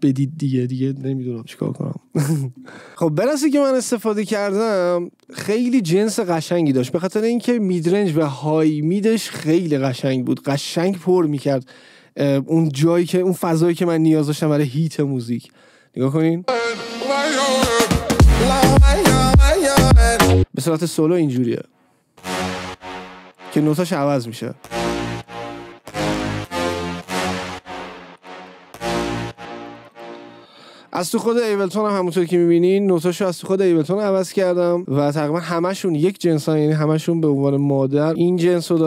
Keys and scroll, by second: 16.6 space, 20.7 space, 24.6 space, 28.7 space.